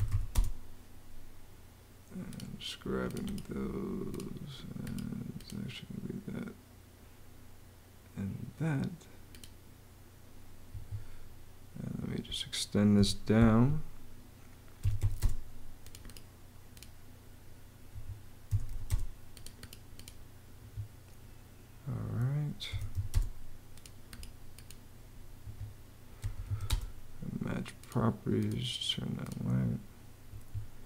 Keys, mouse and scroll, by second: 0.0-1.0 typing, 10.5 Escape, 12.7 e, 13.3 Escape, 14.3-15.2 typing, 17.7 Escape, 18.0-18.9 typing, 20.3 Escape, 22.2-23.2 typing, 25.2 Escape, 26.0 m, 26.4 space, 30.1 Escape.